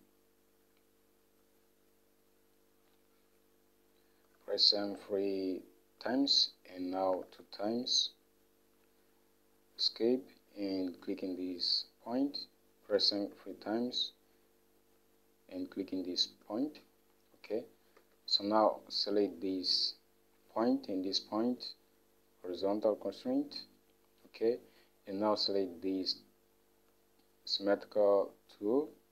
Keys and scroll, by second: 4.4 m, 4.6 m, 5.0 m, 7.3 m, 7.5 m, 10.0 Escape, 13.1 m, 13.2 m, 13.5 m, 16.6 Escape.